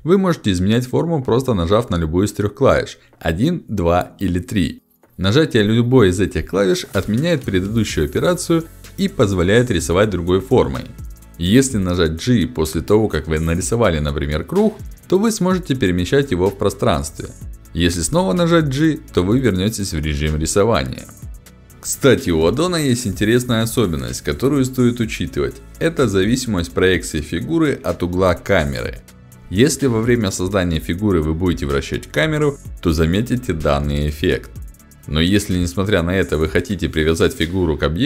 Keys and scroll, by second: 3.6 1, 9.9 2, 11.2 g, 18.2 g.